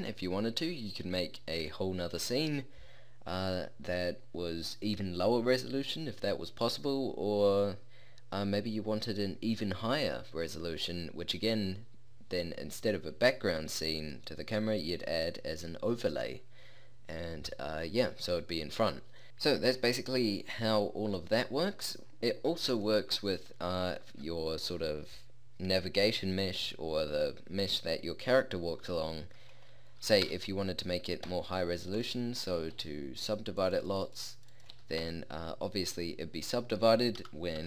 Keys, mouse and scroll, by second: 22.8-29.6 right drag, 30.3 Tab, 31.3 w, 32.8 t, 34.8 t, 35.0 Tab, 37.2 KP_0, 37.6 p.